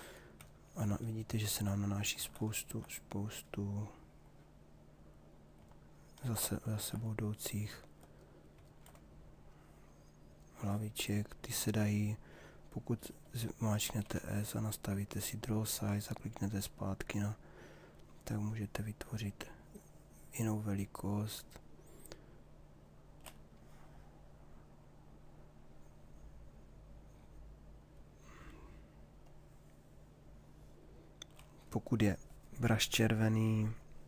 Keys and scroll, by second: 1.8 ctrl+z, 5.9 ctrl+z, 13.6 s.